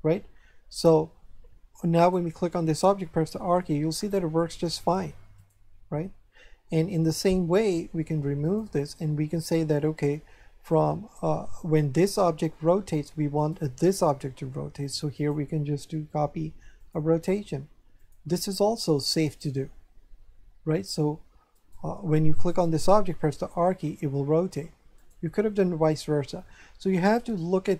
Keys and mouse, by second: 2.0 right click, 3.1 r, 5.3 right click, 7.1 right click, 8.4 click, 12.0 right click, 13.4 right click, 15.1 click, 16.8 click, 18.0 click, 19.1 click, 21.5 right click, 23.0 r, 24.9 right click.